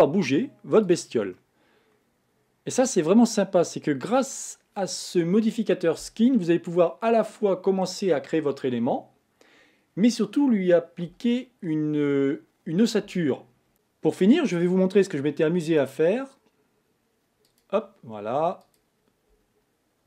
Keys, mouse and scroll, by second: 1.4-4.3 middle drag, 13.7 click.